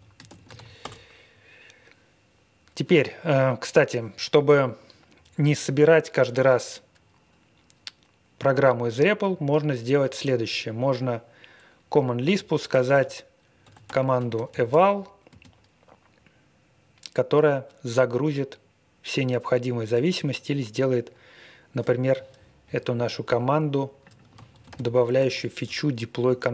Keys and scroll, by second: 0.0-0.9 typing, 8.6 Up, 9.2 Up, 10.0 Up, 12.2-15.3 typing, 24.3 ctrl+a, 24.6 ctrl+space, 24.6 ctrl+e, 25.1 alt+w.